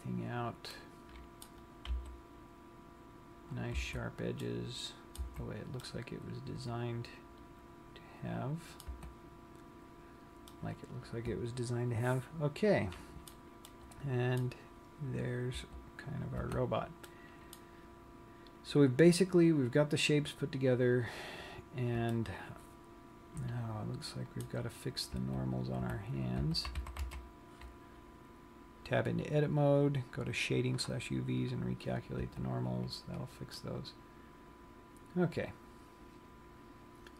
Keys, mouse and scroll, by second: 2.1 g, 4.2 click, 4.2 a, 4.8 middle click, 5.4 z, 6.0 middle click, 9.0 Tab, 9.8 scroll down 1, 10.6 middle click, 13.8 middle click, 15.2-15.6 scroll up 6, 15.6 Tab, 16.0 scroll down 1, 16.4 Tab, 17.2 middle click, 18.0 scroll down 1, 19.1-19.5 scroll up 7, 20.3 click, 21.3 scroll down 1, 22.2 middle click, 25.1 scroll up 5, 25.3 Tab, 25.9 Tab, 26.5 Tab, 26.9 a, 27.2 a, 29.2 click, 31.7 click, 32.3 Tab, 33.0 scroll down 1, 33.7 middle click.